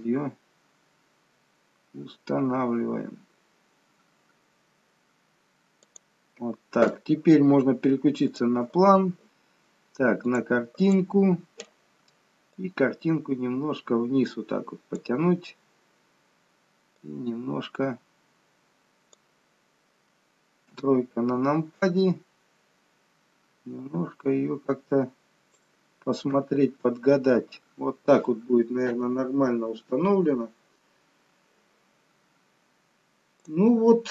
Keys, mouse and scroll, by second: 8.5 click, 10.4 click, 11.0 click, 12.7 click, 17.2 click, 20.9 KP_3, 22.2-23.9 scroll down 5, 23.9 scroll down 1, 24.1 click, 26.5 KP_0, 33.7 click.